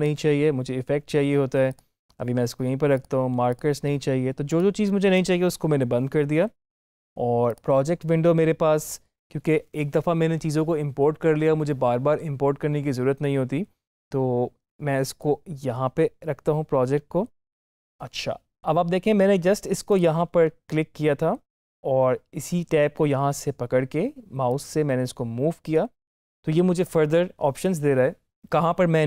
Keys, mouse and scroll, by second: 7.4 click, 15.1-19.4 drag, 19.8 click, 24.4-29.0 drag.